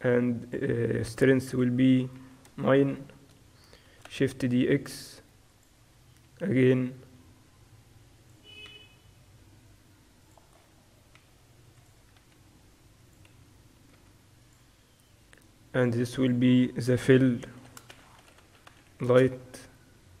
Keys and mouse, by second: 4.0 shift+d, 7.1 r, 9.5 s, 10.6-12.6 middle drag, 11.4 s, 12.6 g, 14.2 s, 15.8-18.9 drag, 17.7 l.